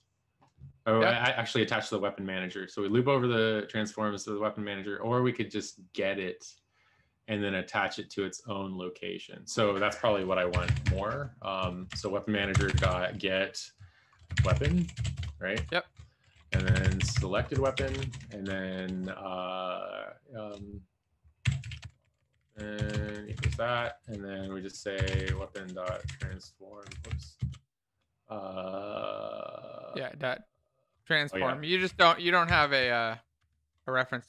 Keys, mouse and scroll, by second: 10.9-13.3 typing, 14.4-17.6 typing, 17.7 Right, 17.8 ctrl+s, 18.2 Home, 21.2-23.4 typing, 23.5 ctrl+s, 23.8 End, 24.0 End, 24.4 Return, 25.0-26.0 typing, 26.3 Return, 26.9 ctrl+z, 27.3 ctrl+space, 31.1 Escape, 32.5-34.2 typing.